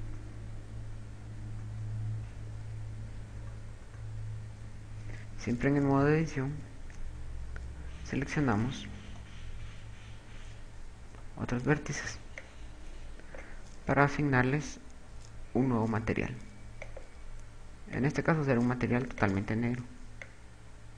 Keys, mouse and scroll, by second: 0.0-0.6 typing, 2.0 KP_0, 2.6 KP_6, 2.6 KP_8, 5.6 Tab, 6.5 KP_6, 9.3 z, 11.6 a, 12.0 b, 17.4 click, 17.8 click.